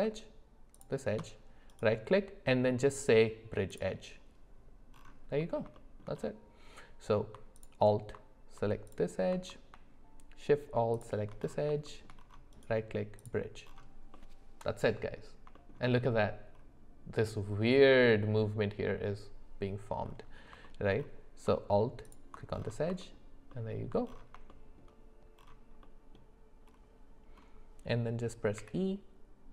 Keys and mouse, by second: 0.7 alt+shift+click, 1.8-3.8 right drag, 5.4 middle click, 5.7 shift+middle click, 7.5 alt+click, 10.9 alt+shift+click, 11.8 shift+middle click, 12.5 right click, 14.1-15.2 middle drag, 15.5 shift+middle click, 20.6 shift+middle click, 23.0 alt+middle click, 23.5 alt+middle click, 24.5 shift+middle click.